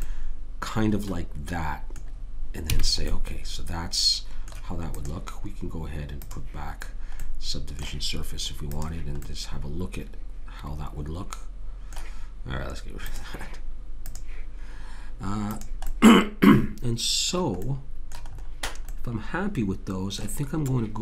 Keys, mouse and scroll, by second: 0.0 middle click, 2.6 a, 3.3 middle click, 3.5 middle click, 4.9-7.9 drag, 10.6 middle click, 13.0-17.1 drag, 17.4-19.1 middle drag.